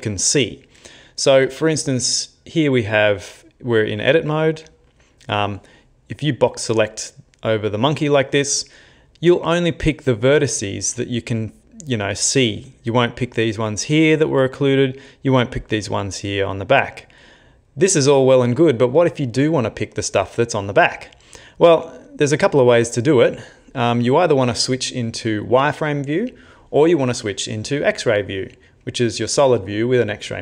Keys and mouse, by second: 5.2 click, 12.6 middle click, 14.5 middle click, 16.2 middle click, 16.9 middle click, 17.7 middle click, 18.3 middle click.